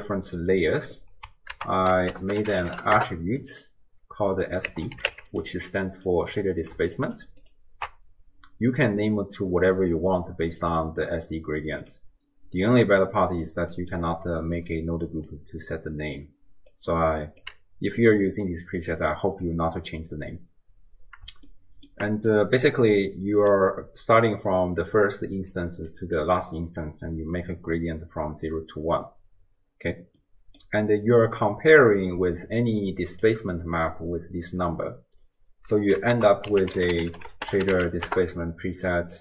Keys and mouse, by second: 1.6 ctrl+a, 4.5 click, 5.7 click, 7.4 ctrl+shift+click, 10.6-11.9 drag, 12.8 click, 13.0 click, 13.8 middle click, 14.7 d, 15.2 d, 15.3 click, 15.3-16.7 d, 16.7 click, 17.4 d, 21.5-21.9 shift+drag, 22.4 click, 23.7-26.4 typing, 25.9 click, 30.2 click, 32.1 d, 32.6 d, 33.3 d, 33.4 d, 36.2 ctrl+a.